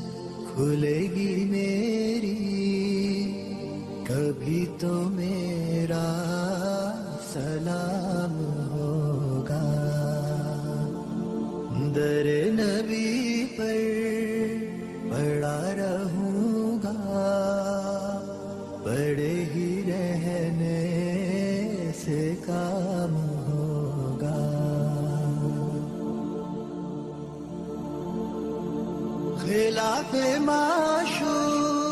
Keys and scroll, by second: 0.4 t, 1.4 Escape, 2.2 F2, 5.5 shift+Page_Down, 6.4 Escape, 9.2 F4, 16.6 b, 17.6 shift+F2, 19.1 Escape, 23.8 l, 24.4 Escape, 27.5 ctrl+z, 30.3 ctrl+z.